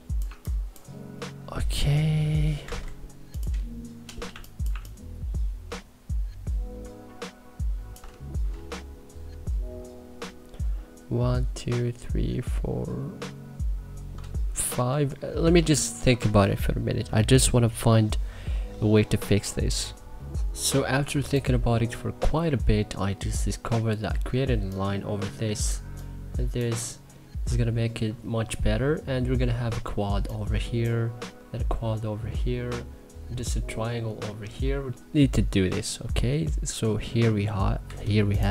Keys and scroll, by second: 0.0 1, 2.4 c, 4.1 2, 4.5 1, 15.5 ctrl+s, 37.5 c.